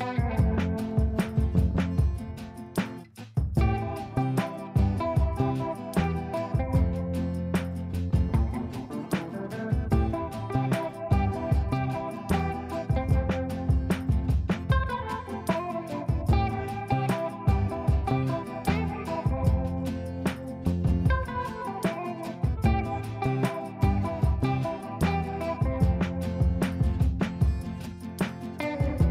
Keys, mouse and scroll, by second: 0.4-6.9 drag, 6.9 F2, 7.1-12.1 drag, 12.1 click, 12.7 ctrl+right click, 13.4 click, 17.1 ctrl+a, 18.5-24.0 typing, 25.3 typing, 26.1 ctrl+space, 28.1 shift+click, 28.8 r.